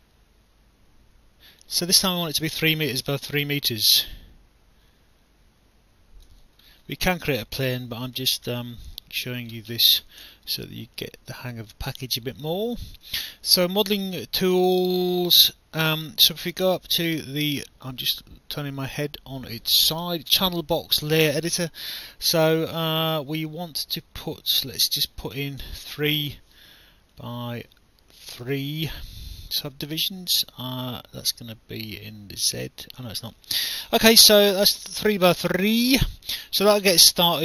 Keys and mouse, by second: 2.2 alt+click, 3.3 click, 6.7 alt+middle click, 7.9 alt+click, 8.7 alt+click, 13.5 click, 15.1 click, 24.6 click, 25.5-26.3 typing, 27.1 click, 28.4 BackSpace, 28.5 3, 32.0 click, 34.3 alt+click, 35.3 alt+click, 37.2 alt+click.